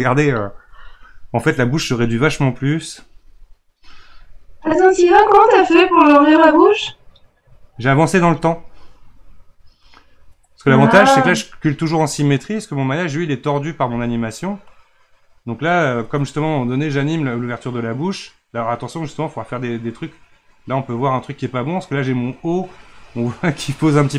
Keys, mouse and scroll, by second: 2.3-11.7 drag, 16.8-24.1 drag.